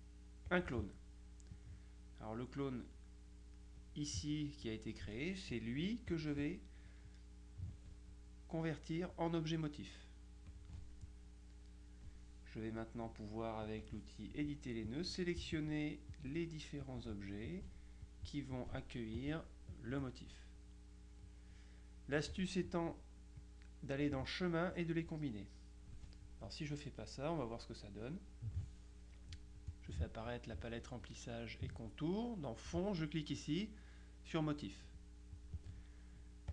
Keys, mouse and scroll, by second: 0.6 click, 1.6-3.4 drag, 6.2 click, 10.6 click, 12.8 middle click, 13.9 click, 14.9 click, 15.6 shift+click, 16.9 click, 17.6 click, 18.6 click, 19.3 click, 21.2 click, 23.5 click, 26.8 click, 29.8 click, 35.4 click.